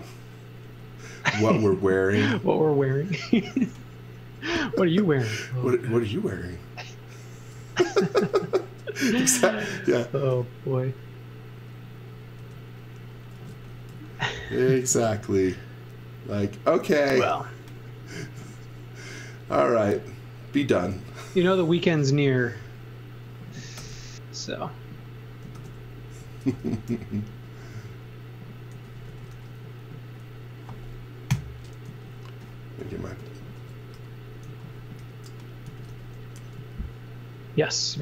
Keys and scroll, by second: 0.7 b, 7.1-8.0 typing, 10.3 b, 12.4-15.1 typing, 20.9 e, 23.8 shift+5, 25.5-27.4 typing, 28.5-29.8 typing, 31.3 p, 31.9 z, 33.5-36.6 typing.